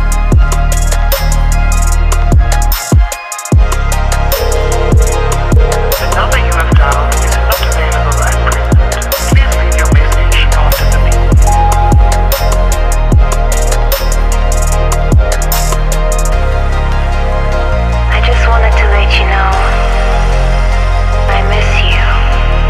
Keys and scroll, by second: 0.2 9, 0.3 b, 0.9 Return, 3.0 Escape, 8.1 space, 8.9 space, 9.9 Up, 11.3 Up, 13.1 shift+Up, 13.9 ctrl+z, 14.4 Up, 18.5 Up, 20.3 ctrl+g.